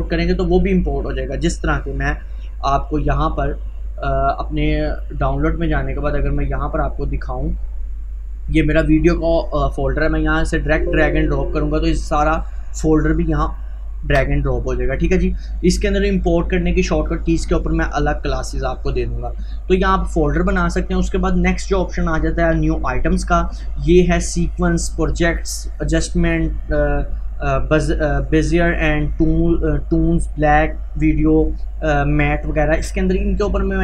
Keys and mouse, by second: 1.6-10.4 drag, 13.4 click, 14.1 Delete, 14.9 click, 19.1 click, 19.7 Delete, 22.5 click.